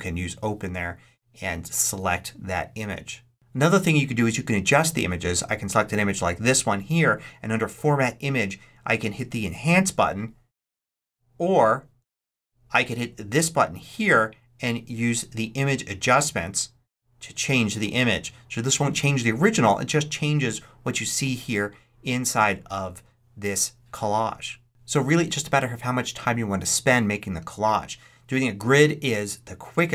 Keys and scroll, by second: 11.9 super+z.